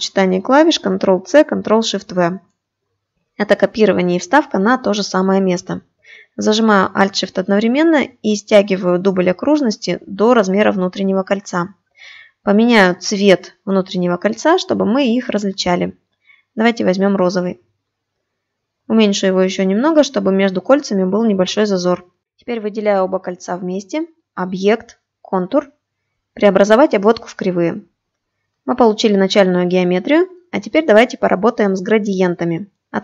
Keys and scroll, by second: 0.6 ctrl+c, 2.0 ctrl+shift+v.